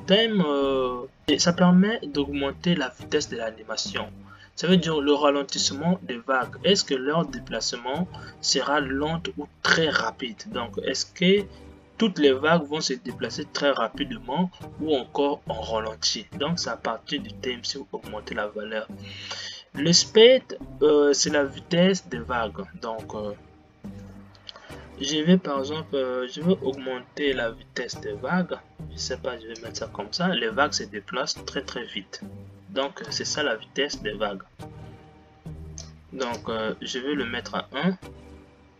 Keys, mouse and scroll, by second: 7.1 space, 26.9-30.0 drag, 33.4 space, 34.1-38.7 drag.